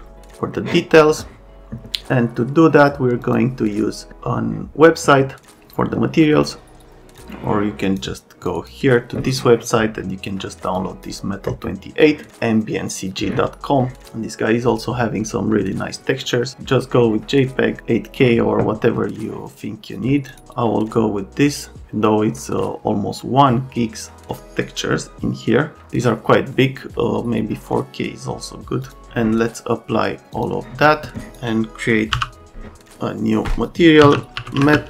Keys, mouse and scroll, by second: 16.7 click, 20.3 click, 32.1 m, 33.7-34.8 typing.